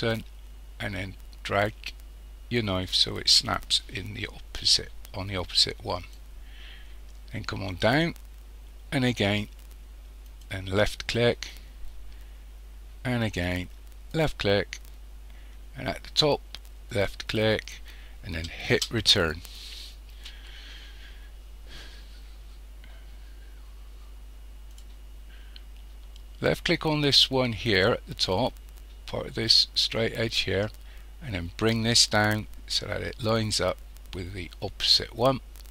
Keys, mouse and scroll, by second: 18.9 Return.